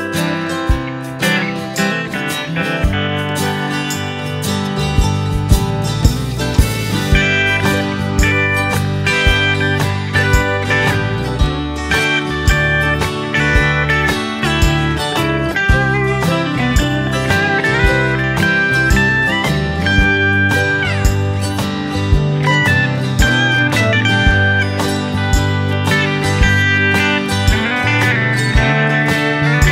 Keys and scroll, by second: 12.2 ctrl+c, 12.3 ctrl+v, 18.7 ctrl+c, 18.9 ctrl+v, 22.6 Left, 23.5 Right, 28.1 Left.